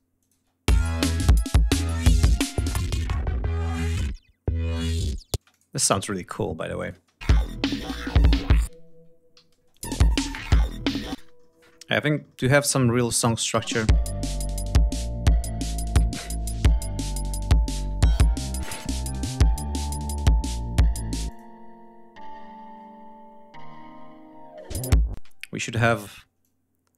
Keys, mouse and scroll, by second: 0.1 click, 0.2 space, 1.4 scroll down 2, 2.7 click, 5.2 space, 5.4 click, 5.9 ctrl+scroll down 2, 6.7 click, 6.8 space, 7.8 shift+click, 8.2 shift+right click, 8.7 ctrl+shift+scroll up 3, 9.2 ctrl+d, 9.4 ctrl+space, 9.6 ctrl+click, 10.1 ctrl+scroll down 2, 10.8 ctrl+scroll down 2, 11.0 ctrl+space, 11.5-12.1 ctrl+scroll up 3, 12.5 scroll up 2, 13.3 click, 13.5 space, 15.6 ctrl+scroll up 2, 16.4 ctrl+scroll down 2, 16.9 ctrl+scroll up 2, 17.4-17.8 scroll down 2, 18.5 scroll up 2, 21.2 click, 24.6 click, 25.0 space, 25.8 r, 26.3-26.9 drag.